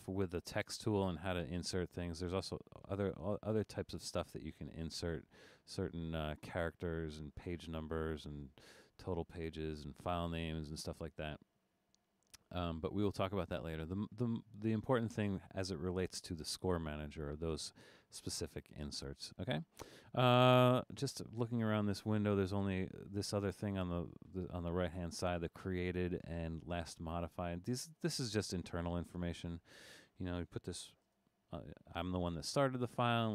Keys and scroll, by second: 30.5-31.4 typing.